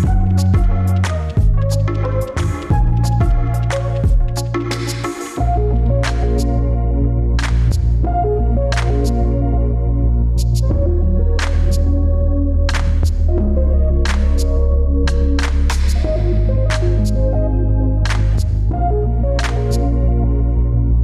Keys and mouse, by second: 0.1 click, 1.6 ctrl+s, 2.4 middle click, 3.3 middle click, 6.1 shift+a, 14.2-16.4 drag.